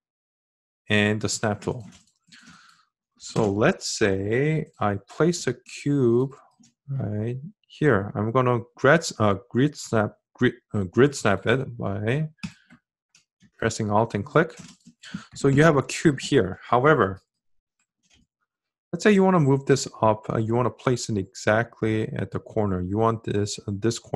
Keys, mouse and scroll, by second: 12.3-15.6 alt+drag.